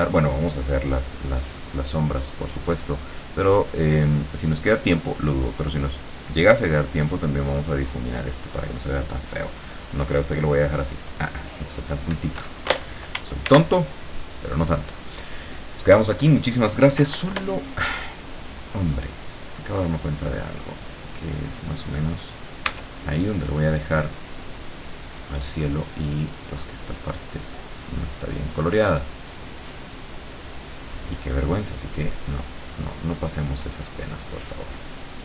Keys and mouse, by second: 13.6 ctrl+s, 17.1 9, 22.8 w, 24.4 click, 25.2-30.4 drag, 31.5-35.2 drag.